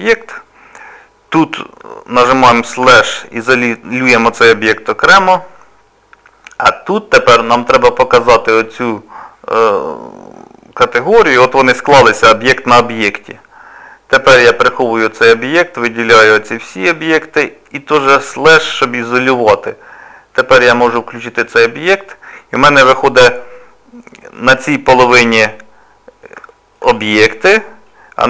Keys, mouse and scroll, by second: 2.9 KP_Divide, 8.2 click, 11.1 scroll down 1, 11.2 scroll up 2, 12.0 middle click, 12.0 scroll up 1, 15.1 click, 16.0 click, 21.7 click, 23.1 click, 23.6 middle click, 26.5 shift+middle click, 26.7 shift+middle click, 27.0 middle click.